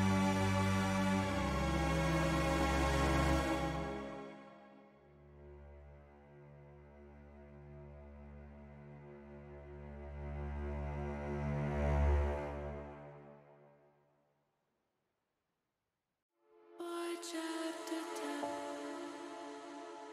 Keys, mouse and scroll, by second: 0.9 Tab, 2.2 click, 3.8 click, 6.2 middle click, 7.0 shift+middle click, 7.7 shift+click, 8.3 middle click, 8.7 click, 10.1 click, 11.1 Tab, 12.2 l, 12.9 middle click, 13.8 shift+middle click, 15.1 shift+d, 15.6 click, 17.3-18.4 drag.